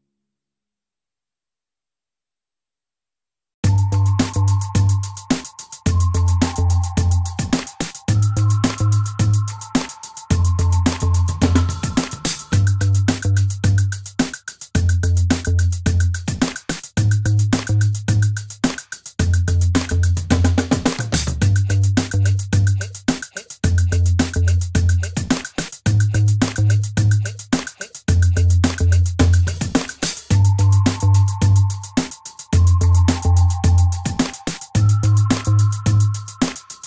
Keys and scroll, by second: 8.9 shift+e, 11.4 ctrl+e.